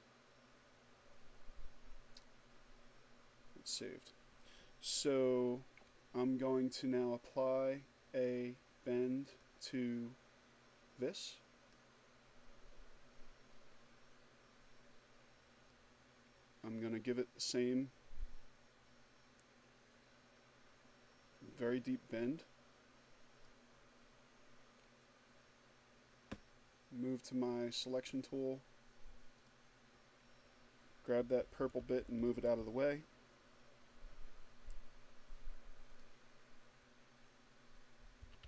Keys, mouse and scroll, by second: 7.8 click, 10.2 click, 14.1-22.2 drag, 26.3 click, 27.7 click, 29.7 shift+Down, 34.3 click, 36.5 shift+Up.